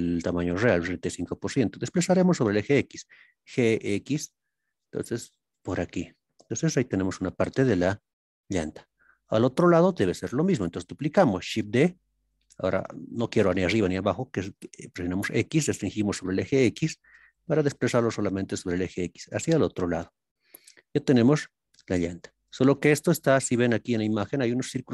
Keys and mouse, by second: 5.5 drag, 6.2-7.2 middle drag, 8.1-9.2 middle drag, 9.8 KP_1, 11.6 shift+d, 19.9 click, 21.1-23.0 middle drag.